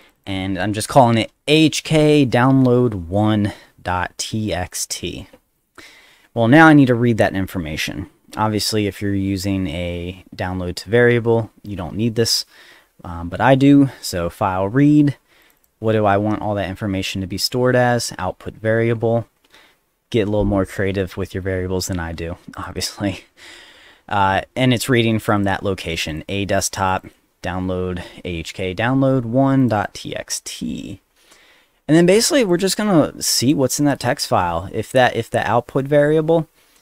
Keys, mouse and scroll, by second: 0.0 click, 4.7 click, 15.4 click, 15.6 click, 22.5 click, 22.7 click, 25.2 click, 25.4 click, 25.9 click, 26.1 click, 26.9 click, 27.0 click, 29.6 click, 29.8 click, 32.5 click, 32.7 click, 33.2 click.